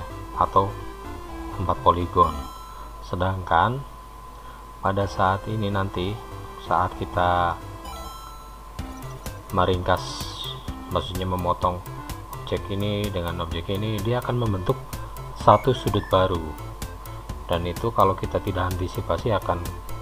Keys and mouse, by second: 7.7-9.3 middle drag.